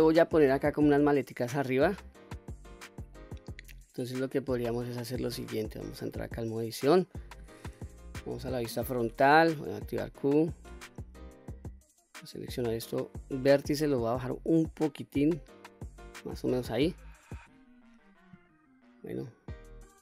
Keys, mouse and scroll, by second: 1.5-2.2 middle drag, 2.7-3.1 scroll up 2, 3.1-3.7 middle drag, 4.4 click, 5.9 Tab, 6.6-7.1 middle drag, 8.2 KP_1, 9.5 q, 10.7 1, 12.5 click, 14.3-16.6 drag, 17.5 q, 17.9 middle click, 18.9 scroll down 1, 19.3-19.8 middle drag.